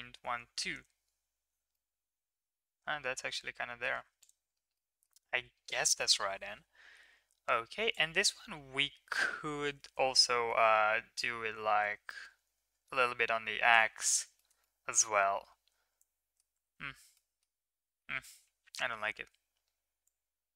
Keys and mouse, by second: 1.7-3.8 middle drag, 4.1 click, 4.7-5.0 middle drag, 5.3 ctrl+s, 5.9-7.0 middle drag, 7.9-9.1 drag, 9.8 ctrl+z, 11.1-13.7 shift+drag, 14.3 shift+middle drag, 14.6-16.3 middle drag, 16.6 ctrl+z, 17.1 middle drag, 17.9 middle drag, 20.0-20.5 drag.